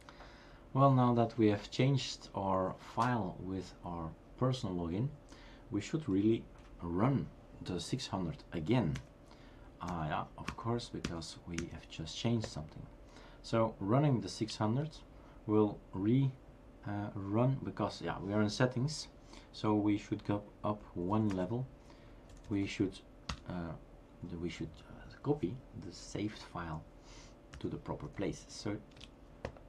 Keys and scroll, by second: 9.0-12.6 Up, 14.5 Return, 20.9-21.6 typing, 24.3 typing, 27.5 Up.